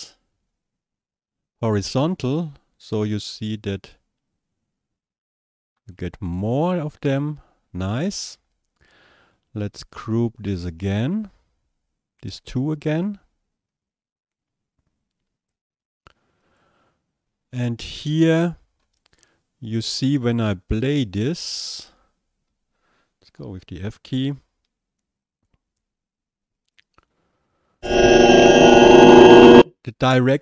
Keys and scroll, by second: 23.4 f.